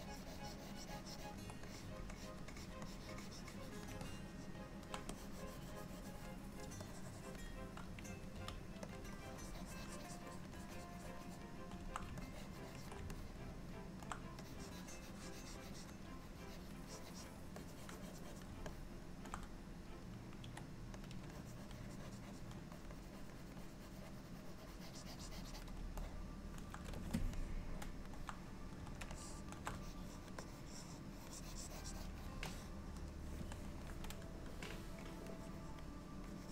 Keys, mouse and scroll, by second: 0.3 ctrl+click, 1.7 click, 2.2 click, 2.6 click, 2.9 click, 4.1 middle click, 5.2 click, 6.9 click, 8.4 f, 9.2 click, 10.4 click, 10.6 click, 11.4 click, 12.3-12.8 ctrl+click, 12.7 ctrl+click, 13.2 middle click, 14.5 click, 14.7 click, 16.4 click, 17.0 click, 17.6 click, 18.1 click, 18.3 click, 18.8 middle click, 20.5 f, 21.4 click, 22.8 click, 23.0 click, 23.4 click, 23.7 click, 26.1 middle click, 27.4 middle click, 29.2 shift+middle click, 29.7 shift+middle click, 29.8 click, 30.2 click, 30.5 click, 30.7 click, 31.4 click, 32.5 middle click, 35.4 click, 36.4 click.